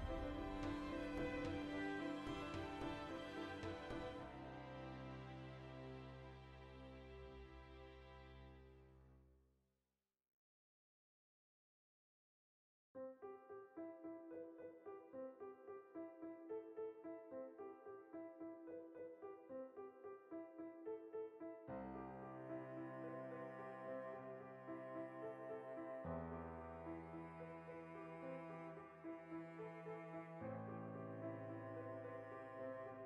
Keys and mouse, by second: 0.9 click, 1.1 alt+right click, 1.5 g, 2.1 click, 2.2 alt+s, 3.2 click, 3.4-5.9 shift+middle drag, 5.9 right click, 6.1-7.7 ctrl+middle drag, 6.7 ctrl+r, 7.7 shift+right click, 8.1 f, 8.3 right click, 8.5 f, 8.6-10.5 middle drag, 9.7 ctrl+z, 10.3 ctrl+r, 10.5 right click, 11.1 f, 11.4-19.1 middle drag, 11.9 a, 12.3 shift+n, 14.4 alt+q, 19.1 right click, 19.5 ctrl+r, 20.0-22.9 shift+middle drag, 22.6 ctrl+r, 22.9 right click, 23.0-24.5 middle drag, 24.3 ctrl+r, 24.7 alt+shift+right click, 25.3 ctrl+x, 25.6 alt+right click, 26.0 ctrl+b, 27.5 click, 27.6-31.0 middle drag, 28.1 ctrl+z, 31.0 g, 32.0 click, 32.5 g.